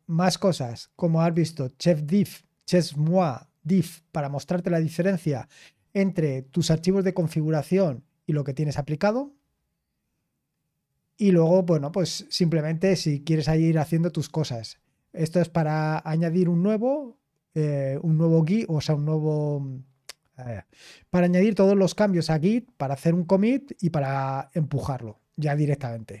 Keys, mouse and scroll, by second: 0.0-0.6 typing, 1.3 click, 2.0-2.8 typing, 9.3-21.4 scroll down 1, 21.4-24.8 drag, 24.8-26.2 scroll down 2.